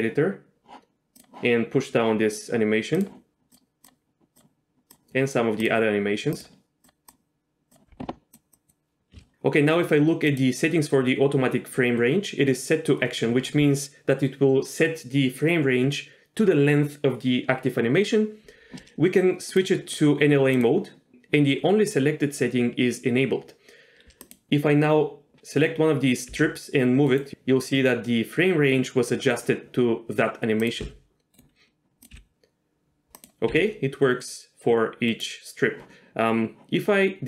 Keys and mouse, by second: 3.0 drag, 3.5 click, 4.9 click, 6.4 click, 6.9 click, 7.7 click, 8.5 click, 9.2 ctrl+z, 10.4-13.4 drag, 19.6-20.9 drag, 21.1-23.2 drag, 24.2 click, 26.3 g, 27.1 right click, 30.6 click, 30.8 g, 31.3-32.0 right drag, 32.1 g, 32.3 g, 33.2 click, 33.5 g, 35.1 right click.